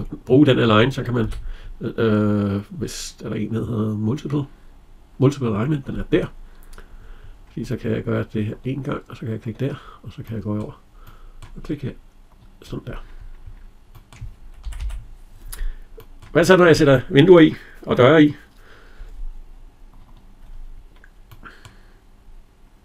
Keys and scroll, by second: 1.0 Escape, 14.5 Escape.